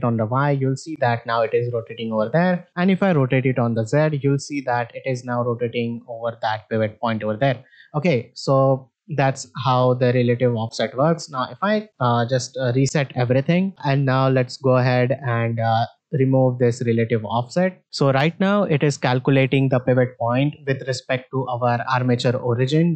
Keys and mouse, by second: 3.0 r, 7.5 middle click, 8.3 shift+middle drag, 13.3 alt+g, 13.4 alt+r, 13.7 shift+middle click, 14.0 middle click, 17.1 click, 17.8 middle click, 17.9 middle click.